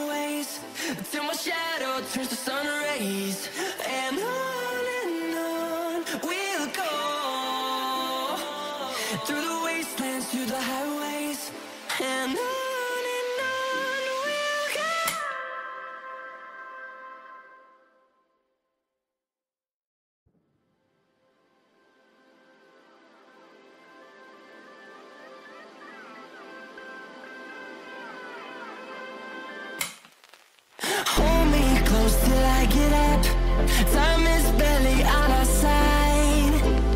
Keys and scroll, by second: 1.0 ctrl+r, 6.1 ctrl+g, 7.2 c, 7.8 shift+F2, 8.2 Escape, 14.1 F3, 20.8 space, 22.0 e, 31.0 ctrl+z, 32.4 ctrl+shift+z, 33.4 Escape, 34.6 Delete, 35.4 F3.